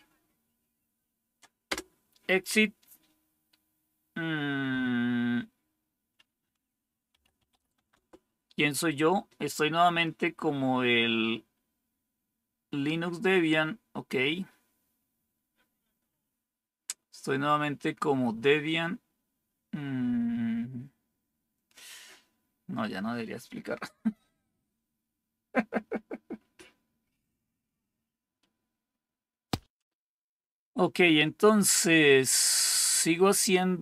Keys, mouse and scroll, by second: 1.6 Return, 6.8-7.9 typing.